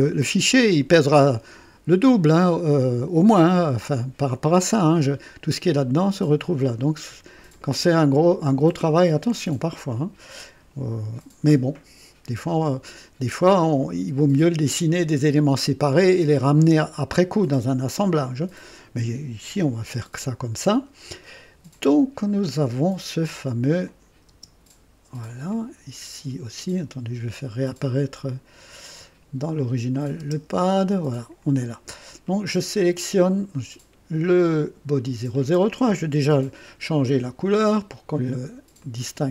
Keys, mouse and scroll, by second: 22.2 scroll down 2, 23.8 click, 24.3 space, 25.2 click, 28.3 click, 29.9 click, 30.2 typing, 31.1 click, 32.1 click, 35.0 click, 36.2 ctrl+d, 37.1 ctrl+click, 37.5 ctrl+click, 38.8 click.